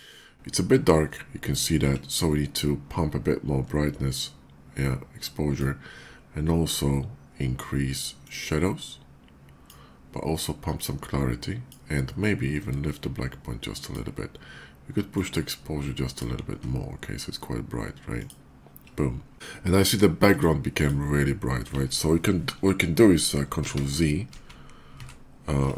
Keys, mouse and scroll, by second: 4.0-5.2 drag, 8.0-9.5 drag, 10.2-11.4 drag, 12.5-13.7 drag, 14.9-16.0 drag, 18.0 click, 20.1 click, 20.5 click, 23.4 ctrl+z.